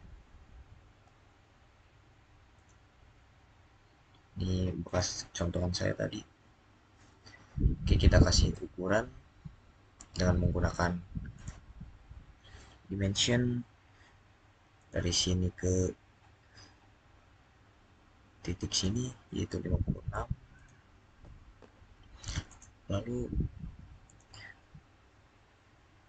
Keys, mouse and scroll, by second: 2.3-4.2 middle drag, 4.6 click, 4.7 click, 11.1 click, 14.6 click, 16.7-18.5 scroll up 1, 18.5 click, 25.4 scroll up 1.